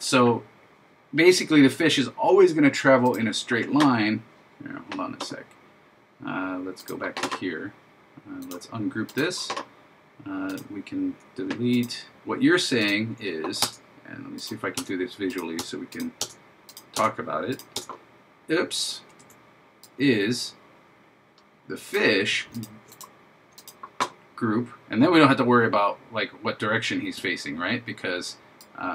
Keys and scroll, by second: 19.2 super+z.